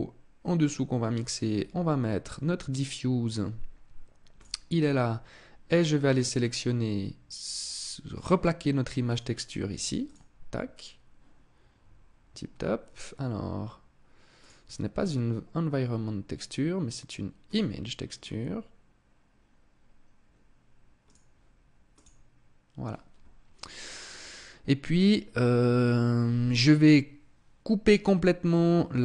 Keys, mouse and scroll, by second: 5.3 click, 8.6 click, 14.0 click, 20.6 click.